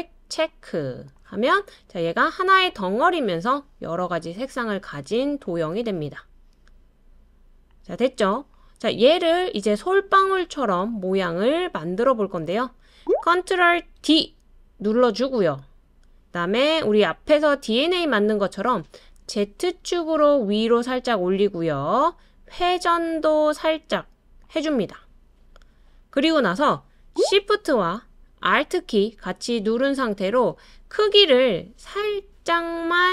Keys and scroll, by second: 14.0 super+d.